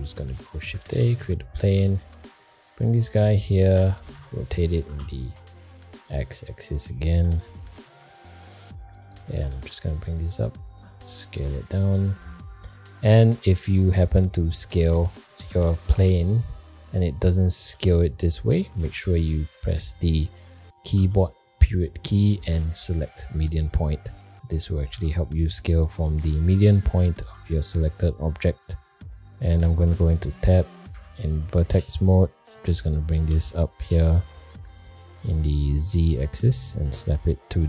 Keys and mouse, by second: 2.1 g, 3.1 middle click, 3.7 r, 6.8 middle click, 7.2 g, 8.2 middle click, 9.0 middle click, 9.4 g, 11.0 s, 12.3 middle click, 12.8 shift+middle drag, 14.1 middle click, 15.3 s, 15.6 s, 17.7 s, 19.7 middle click, 24.9 s, 27.2 s, 28.6 middle click, 29.8 Tab, 30.9 1, 31.3 click, 32.5 middle click, 33.3 g.